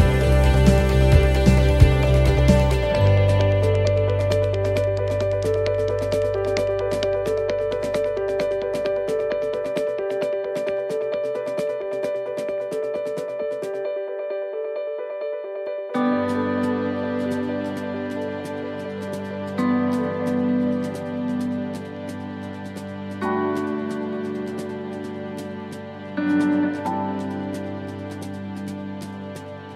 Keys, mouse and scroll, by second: 2.0 middle click, 3.5 s, 5.3 middle click, 10.7 middle click, 12.0 middle click, 12.0 scroll up 1, 12.3 middle click, 12.9 shift+middle click, 13.5 middle click, 14.3 shift+middle click, 15.1 click, 16.1 middle click, 17.0 right click, 17.6 middle click, 18.2 right click, 18.9 middle click, 19.7 right click, 20.4 shift+middle click, 21.0 scroll down 3, 21.4 shift+middle click, 22.0 right click, 23.4 shift+right click, 23.6 shift+right click, 25.0 click, 26.8 right click, 28.1 l.